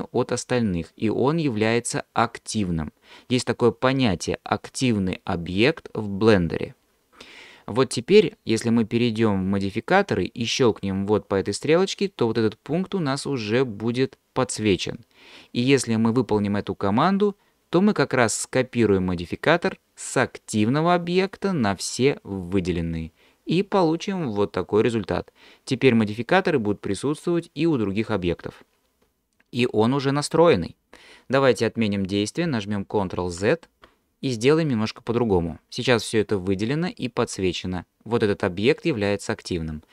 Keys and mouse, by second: 11.5-22.6 drag, 33.3 ctrl+z.